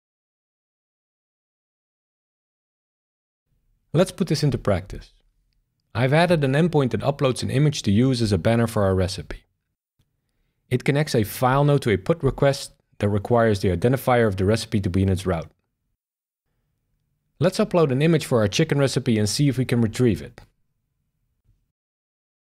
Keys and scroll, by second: 0.9 shift+super+r, 13.2 space, 14.6 space, 20.6 shift+super+r.